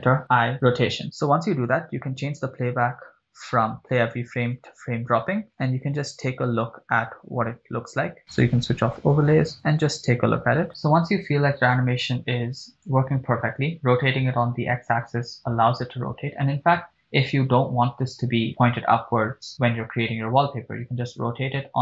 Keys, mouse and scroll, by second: 0.6 i, 2.5 click, 3.1 click, 6.5 click, 9.3 click, 10.6 shift+space, 11.1 click, 12.3-13.4 drag, 20.7 r.